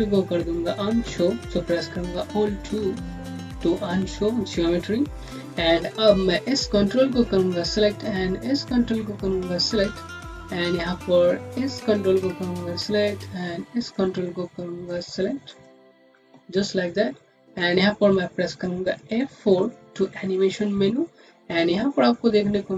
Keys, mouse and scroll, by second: 2.7 alt+2, 5.5 scroll up 1, 5.9 click, 8.5 shift+click, 9.0 scroll down 1, 9.8 alt+middle click, 10.4 scroll up 1, 11.7 shift+click, 16.1 click, 19.3 click, 21.4 F4.